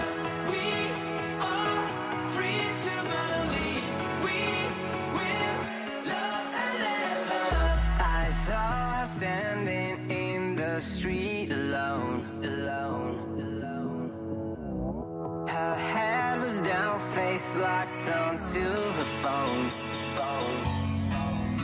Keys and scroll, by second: 0.0 super+d, 7.6 super+a, 8.4 ↺, 10.2 alt+Up, 10.5 alt+Up, 13.9 super+d, 14.8 super+a, 18.0 Escape, 19.9 alt+shift+Down.